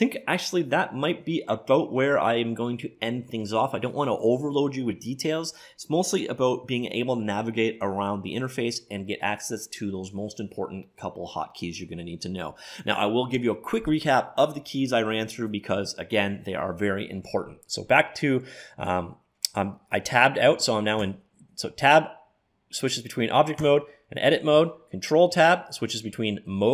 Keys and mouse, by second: 17.3 Tab, 20.5 Tab, 21.2 Tab, 23.6 Tab, 25.5 ctrl+Tab.